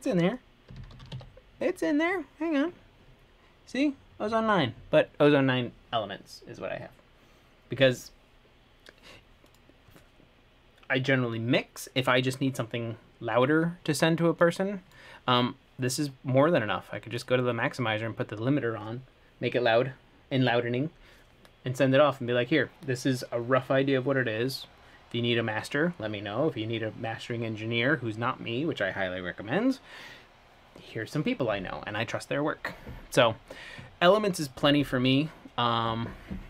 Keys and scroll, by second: 2.2 typing.